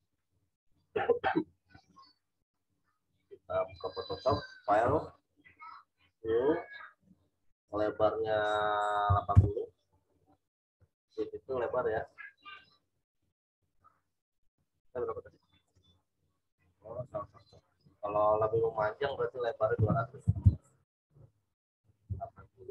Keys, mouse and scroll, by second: 7.1 click, 9.0 typing, 11.3 typing, 12.5 click, 15.6 click, 19.7 2, 21.2 click, 22.1 8.